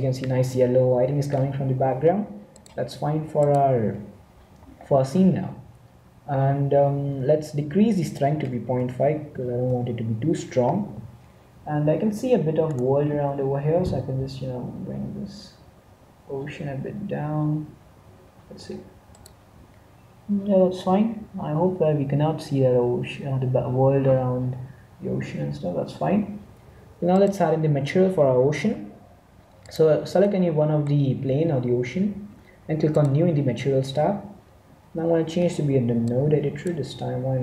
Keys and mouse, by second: 3.5 click, 8.1-9.9 drag, 12.8-14.6 right drag, 13.7 g, 27.1-28.6 drag, 28.6 z, 28.9 z, 29.5 middle click, 30.7 middle click, 32.8-34.5 drag, 36.1-37.4 drag.